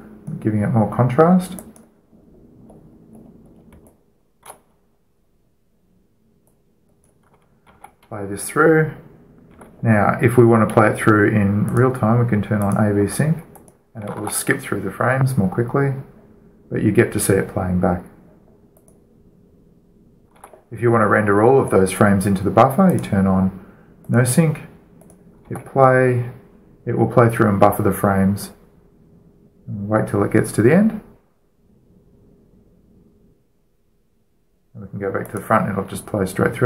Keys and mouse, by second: 4.1-7.1 middle drag, 7.1-9.6 drag, 8.4 alt+a, 10.3 alt+a, 13.1 alt+a, 13.1-16.1 drag, 14.8 alt+a, 19.5-21.1 drag, 21.1 alt+a, 21.5 alt+a, 25.0-27.6 drag, 26.3 alt+a, 35.9-36.6 drag.